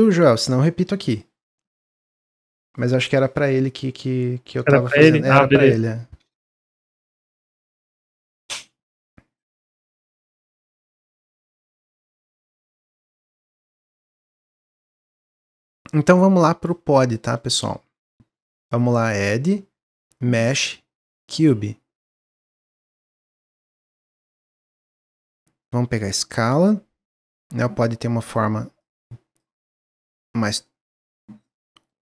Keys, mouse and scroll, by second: 13.6-14.9 middle drag, 14.9-15.3 scroll down 1, 15.3-18.8 middle drag, 18.8-21.8 drag, 21.9-22.6 middle drag, 22.6-23.0 scroll up 1, 23.0-25.6 middle drag, 25.6-26.6 drag, 27.7-29.8 drag, 30.4-31.0 middle drag, 31.0 click, 31.6-32.0 middle drag, 32.0 ctrl+z.